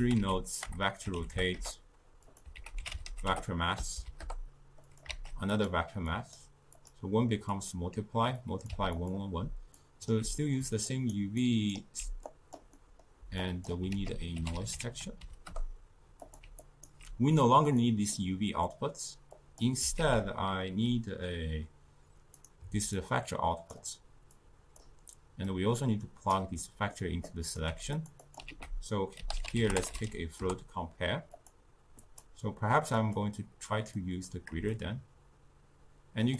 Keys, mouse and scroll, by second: 2.6 ctrl+a, 5.1 shift+d, 6.1 click, 6.8-9.2 drag, 9.9-10.4 alt+right drag, 10.4 middle drag, 10.9-12.3 alt+right drag, 12.3 click, 12.8 middle click, 13.5 click, 14.0 ctrl+a, 16.7-17.9 alt+right drag, 17.9-18.7 drag, 18.7-19.4 middle drag, 19.4 click, 20.1 ctrl+a, 23.0-24.5 drag, 25.5 click, 26.6 middle click, 27.3 click, 27.7 g, 28.3 click, 28.6 ctrl+a, 32.1-36.3 drag.